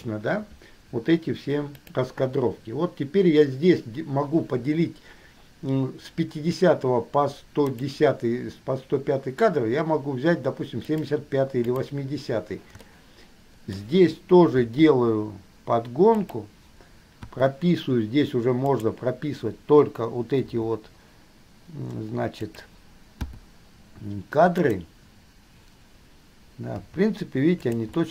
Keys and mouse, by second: 2.0 click, 7.8 click, 11.1 click, 11.8 click, 13.2-13.8 shift+middle drag, 13.8-14.7 drag, 14.7 g, 17.5 i, 19.0 click, 20.6 g, 23.5 i, 23.7-24.8 middle drag, 27.0 g.